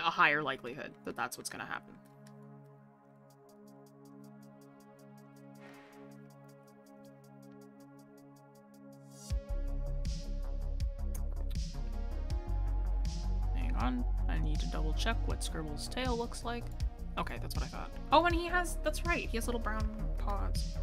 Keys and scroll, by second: 6.5 scroll down 1, 19.9 scroll up 1.